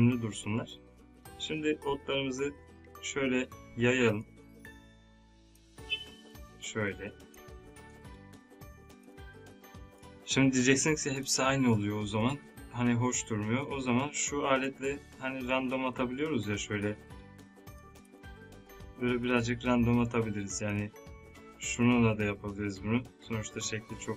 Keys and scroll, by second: 9.4 space.